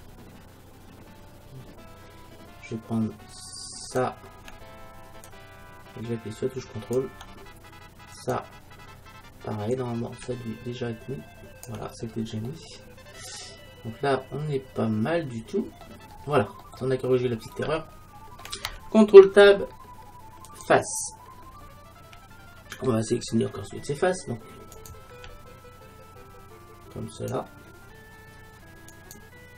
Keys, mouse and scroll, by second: 3.9-6.9 right drag, 5.3-8.2 drag, 8.2-9.8 right drag, 11.4 click, 12.1 middle click, 14.3 middle click, 16.2-16.7 scroll down 1, 16.7-18.2 middle drag, 18.3 middle click, 19.3 ctrl+Tab, 24.8-26.6 right drag, 27.2-29.5 right drag.